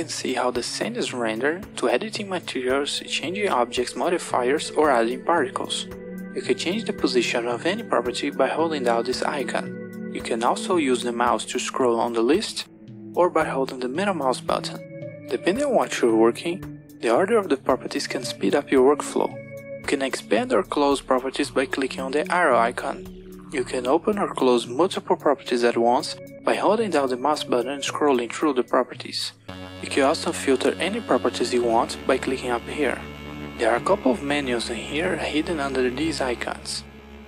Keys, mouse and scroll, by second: 7.7-8.7 drag, 9.6 click, 10.7-11.5 scroll down 5, 11.5-12.8 scroll up 4, 12.8-14.2 scroll up 1, 14.2-16.6 middle drag, 21.8-22.9 scroll down 1, 22.9 click, 24.9 click, 25.6-27.5 drag, 27.8-29.1 drag, 29.5 click, 30.2-33.3 drag.